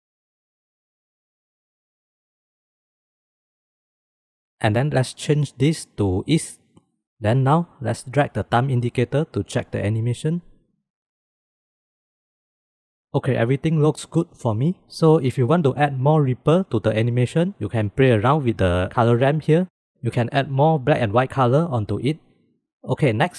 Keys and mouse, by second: 0.6-2.1 drag, 2.9 click, 3.8 click, 5.4-6.8 drag, 7.5-8.5 drag, 14.0 ctrl+s, 18.3 click.